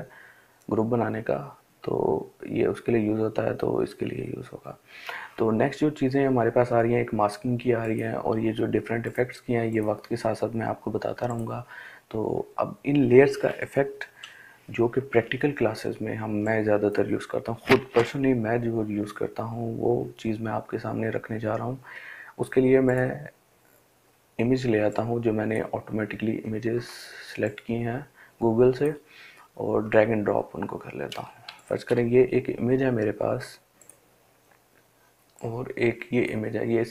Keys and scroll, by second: 13.4 Delete.